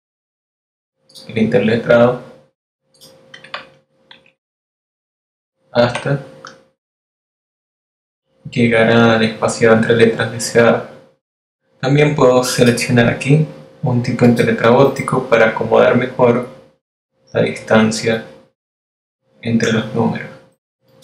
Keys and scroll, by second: 5.4 shift+Up, 5.9 shift+Down, 7.6 shift+Up.